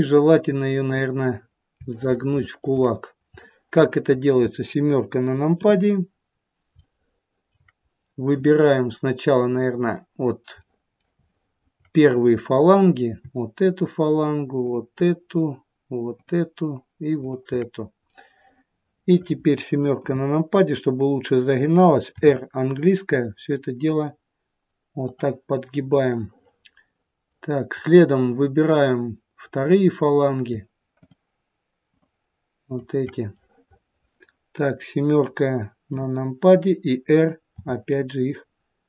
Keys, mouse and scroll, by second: 0.0 middle click, 0.0 scroll up 2, 1.9 shift+middle click, 3.3 middle click, 3.3-4.8 scroll up 1, 5.5 KP_7, 6.7 shift+middle click, 7.9-8.3 scroll up 2, 8.3 middle click, 10.6 middle click, 11.2 shift+middle click, 12.0 click, 14.5 shift+click, 17.9 middle click, 20.0 KP_7, 22.1 r, 25.9 middle click, 28.7 click, 29.5 middle click, 31.0 shift+click, 32.5 shift+click, 33.3 middle click, 35.8 KP_7, 37.5 r.